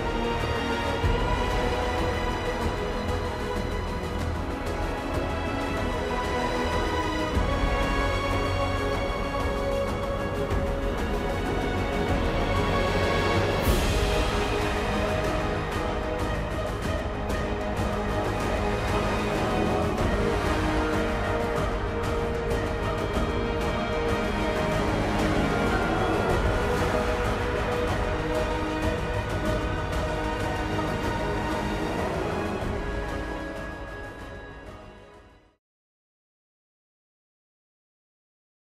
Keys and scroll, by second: 10.1 ctrl+alt+shift+e, 13.5 ctrl+alt+shift+e.